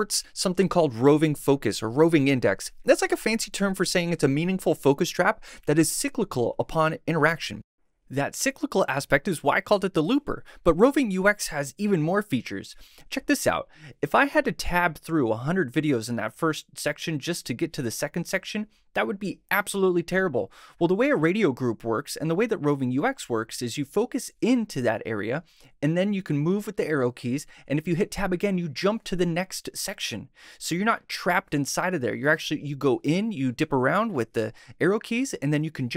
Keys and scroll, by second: 28.6 Tab, 29.1 Right, 29.9 Left, 30.5 Tab, 31.0 Tab, 31.6 shift+Right, 31.7 shift+Tab, 32.2 shift+Left, 32.9 Tab, 33.3 Left, 34.0 shift+Left, 34.1 shift+Tab, 34.5 shift+Right, 35.2 Tab, 35.6 Right.